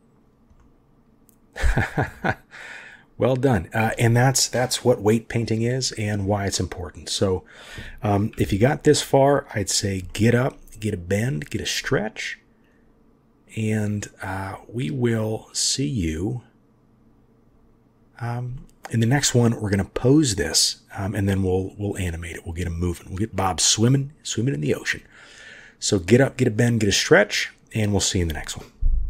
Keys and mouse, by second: 0.5-1.5 drag, 1.2 middle click, 2.0-3.6 drag, 2.0-3.0 middle drag, 6.1-7.6 drag, 8.3 KP_3, 10.0-10.4 shift+drag, 11.3-11.6 shift+drag, 12.6-13.5 drag, 18.5 shift+click, 21.1 click, 23.2 click.